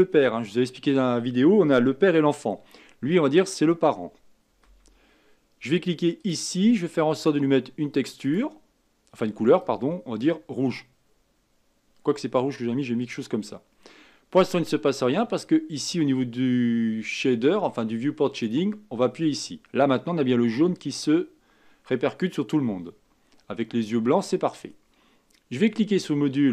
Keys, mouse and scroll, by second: 0.6-3.7 scroll down 2, 4.6 KP_1, 6.2 click, 7.1-8.3 drag, 18.5 click, 20.0-21.3 scroll up 3.